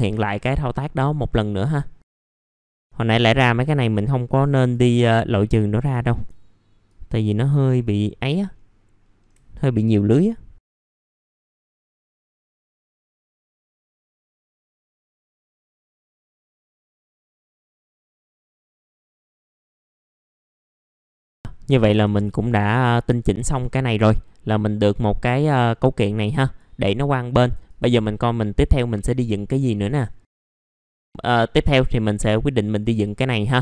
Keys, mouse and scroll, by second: 0.0 middle click, 0.5 scroll up 1, 0.9 middle click, 2.2 alt+click, 2.4 middle click, 2.6 alt+click, 4.3 scroll up 1, 4.7 alt+click, 6.8 alt+click, 7.5 middle click, 7.5 scroll down 1, 7.9 middle click, 8.1 scroll down 1, 8.5-9.3 scroll up 1, 9.5 alt+click, 10.7 middle click, 10.7 scroll down 1, 10.9 scroll up 1, 11.3 alt+click, 12.0 middle click, 12.1-12.8 scroll down 2, 12.3 alt+click, 12.5 middle click, 12.8 scroll up 1, 13.1 alt+click, 13.8 alt+click, 14.0 middle click, 14.1 scroll down 1, 14.4 scroll up 1, 14.6 alt+click, 15.1 alt+click, 15.4 middle click, 15.5 scroll down 1, 15.7 alt+click, 16.3 middle click, 16.3 scroll down 1, 16.4 middle click, 16.6 scroll up 1, 16.9 middle click, 16.9 scroll down 1, 17.0 middle click, 17.2 scroll up 1, 17.4 middle click, 17.6-18.0 scroll down 2, 17.8 middle click, 18.0 scroll up 1, 18.4 alt+click, 18.6 middle click, 18.8 alt+click, 19.0 middle click, 19.0 scroll down 1, 19.2 alt+click, 19.9-20.2 scroll up 1, 20.3 BackSpace, 20.5 middle click, 20.5-21.1 scroll down 2, 20.9 F4, 21.0 middle click, 22.5-22.9 scroll down 1, 22.9 middle click, 23.6 scroll down 1, 25.2-26.6 drag, 27.7 click, 28.1-30.1 scroll up 1, 30.1 scroll down 1, 30.3 middle click, 31.7-32.8 scroll up 1, 32.8 click, 33.2 middle click.